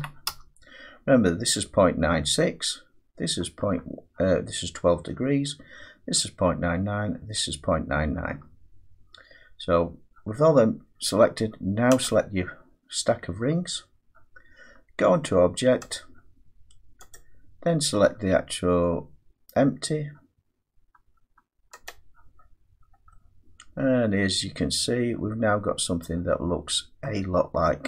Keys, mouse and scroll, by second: 0.3 Return, 12.0 click, 15.9 click, 17.9 click, 21.9 click, 22.7 scroll down 1, 22.8-23.1 scroll down 3, 26.5 scroll down 1, 27.0 middle click, 27.3-27.7 scroll.